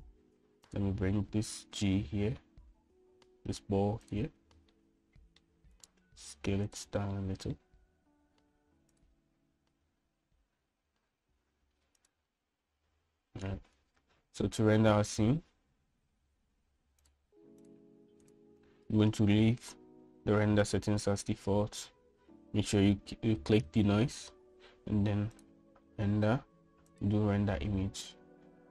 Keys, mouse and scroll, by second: 0.2-0.7 middle drag, 3.0 g, 6.0-6.7 middle drag, 7.2 s, 8.4-8.9 middle drag, 9.5 g, 11.5 g, 18.9 right click, 19.5 right click, 26.7-28.7 drag.